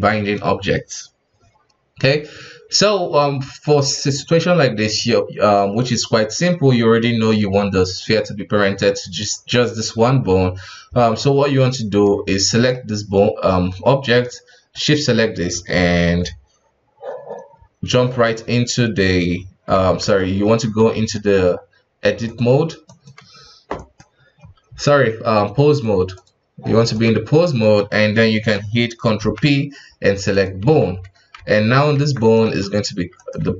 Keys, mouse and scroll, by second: 12.5 right click, 14.7 shift+right click, 19.7 ctrl+Tab, 21.1-22.2 middle drag, 22.2-23.7 drag, 23.7 right click, 24.6 Tab, 25.7 click, 26.1-27.4 drag, 27.4-29.2 middle drag, 29.2 ctrl+p, 30.6 KP_1, 31.3 ctrl+Tab, 31.9 ctrl+Tab, 32.2 right click, 32.5 g, 33.4 r.